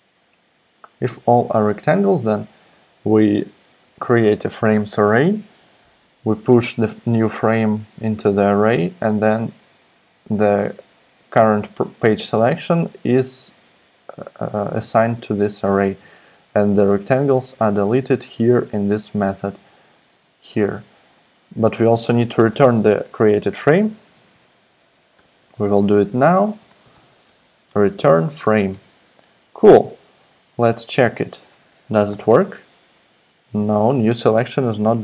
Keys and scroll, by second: 22.4 Return, 22.7 Return, 23.5-24.8 typing, 25.1 Tab, 25.8-27.4 typing, 28.7 super+s, 30.0 ↻, 32.1 alt+super+p, 34.8 super+z.